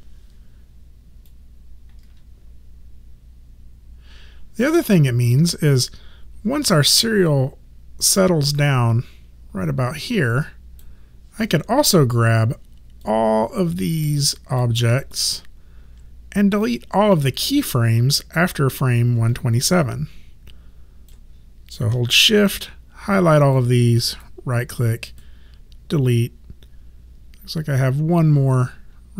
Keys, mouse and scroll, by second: 1.2 click, 11.8 click, 14.9 Caps_Lock, 15.1 click, 16.6 click, 19.2 Caps_Lock, 19.3 click, 22.2 shift+click, 24.1 right click, 25.1 click.